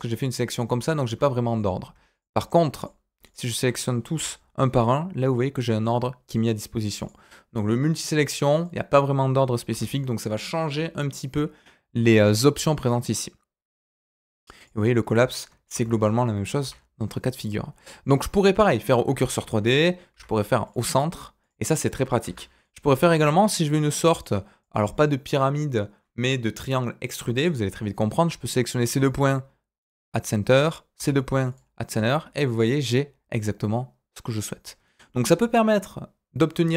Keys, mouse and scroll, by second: 1.5 click, 2.1 shift+click, 2.7 shift+click, 3.2 shift+click, 4.1 m, 7.0 click, 7.5-8.6 drag, 9.7 m, 15.7 ctrl+z, 16.6 m, 19.4 ctrl+z, 20.1 m, 22.2 ctrl+z, 22.5 click, 22.8 middle click, 24.2 click, 28.8 m, 30.4 click, 30.9 m, 31.9 middle click, 33.3-35.1 middle drag.